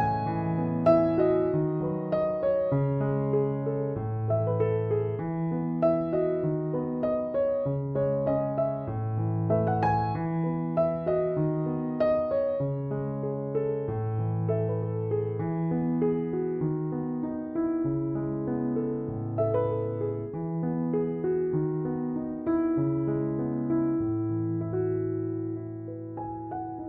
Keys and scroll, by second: 23.8 Escape.